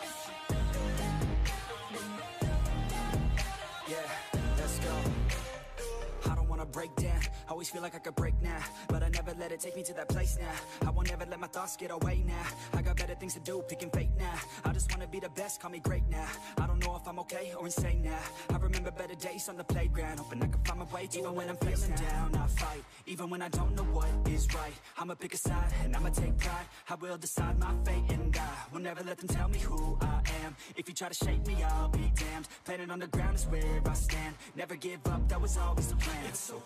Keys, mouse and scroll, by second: 0.2 s, 1.8 shift+middle click, 2.2 click, 2.6 shift+click, 2.7 shift+click, 3.1 s, 3.7 click, 4.4 s, 5.4 click, 6.1 s, 6.8 middle click, 7.3 click, 7.5 scroll down 3, 7.6-8.2 middle drag, 8.2 a, 8.4 3, 8.5-8.9 right drag, 8.9 click, 9.1-10.2 middle drag, 10.2-10.5 scroll up 1, 10.5 alt+click, 10.8 2, 10.9 alt+click, 11.4 ctrl+b, 12.6 click, 12.9 KP_3, 13.5 click, 13.8 Tab, 14.3 click, 14.4 scroll down 1, 15.2 click, 15.4 Tab, 15.5 scroll up 2, 15.7 shift+middle click, 17.5 l, 17.8 s, 18.7 g, 20.4 ctrl+z, 20.5 ctrl+z, 20.7 ctrl+z, 21.4 click, 21.7 shift+a, 23.1 ctrl+z, 23.4 shift+a, 24.3 ctrl+z, 24.6-30.2 typing, 26.5 shift+middle click, 26.7 scroll up 3, 27.4 scroll up 1, 28.3 click, 30.1 scroll up 1, 30.5 shift+click, 31.3 e, 33.5 e, 34.0 r, 34.5 g, 36.0 shift+middle click.